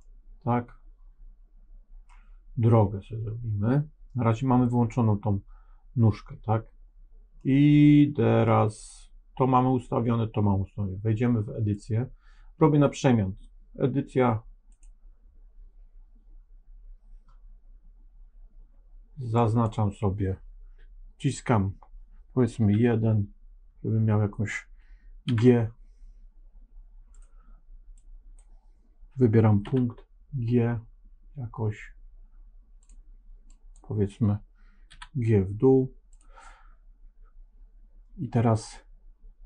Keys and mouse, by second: 0.0-2.1 middle drag, 7.4 middle click, 11.8-14.7 drag, 19.3 click, 22.6 KP_1, 25.2 g, 27.8 click, 29.6 g, 33.4-34.8 drag, 34.8 g.